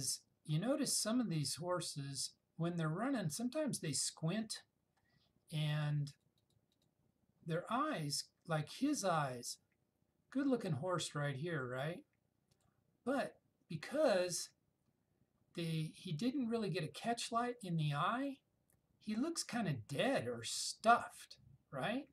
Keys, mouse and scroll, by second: 5.8 click, 9.2 click, 11.6-12.9 drag, 17.5-21.1 drag.